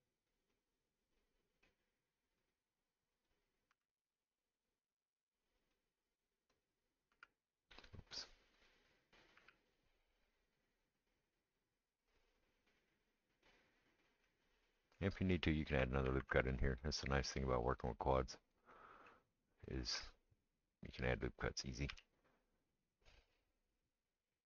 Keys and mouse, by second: 2.4 click, 3.1 click, 3.7 g, 5.6 click, 6.5 click, 7.1 g, 7.9 middle click, 8.5 click, 8.7-18.0 middle drag, 9.3 g, 16.0 ctrl+r, 18.0 click, 18.2-19.6 middle drag, 19.6-21.0 drag, 21.0-24.4 middle drag, 21.9 g.